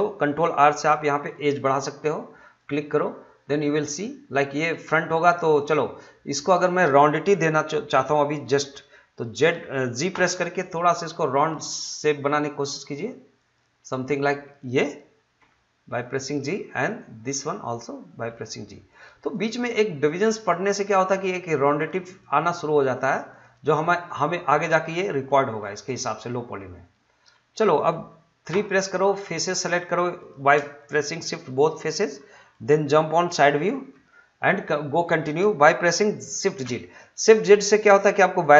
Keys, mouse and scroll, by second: 0.5 ctrl+r, 1.5 click, 3.0-5.1 middle drag, 5.1-8.8 drag, 10.1 g, 13.4 click, 15.4 g, 16.2 click, 17.4 g, 18.9 click, 19.7 g, 20.5 click, 22.7 g, 23.3 click, 24.0 middle click, 25.3-27.5 middle drag, 27.5 scroll up 1, 27.7 middle click, 28.5 3, 29.2 click, 30.2 shift+click, 30.8 middle click, 32.2 scroll down 1, 32.4 middle click, 36.5 shift+z.